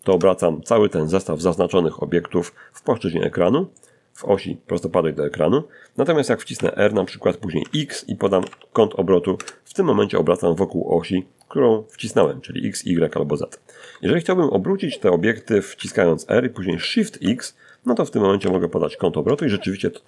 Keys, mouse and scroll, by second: 1.9 shift+middle click, 4.8 r, 5.8 x, 6.6 9, 7.6 Return, 7.6 0, 9.4 scroll up 2, 10.0 shift+middle click, 10.4 shift+scroll up 2, 11.1 shift+y, 12.0 Escape, 14.0 r, 15.0 shift+x, 16.6 9, 17.4 Return, 17.4 0, 19.4 scroll down 2.